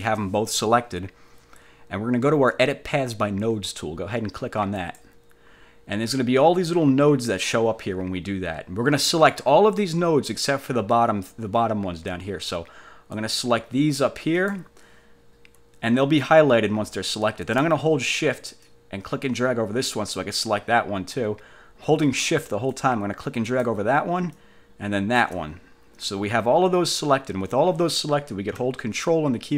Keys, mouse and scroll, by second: 4.9 click, 13.3-14.8 drag, 18.8-20.2 shift+drag, 22.8 shift+click, 24.5 shift+click.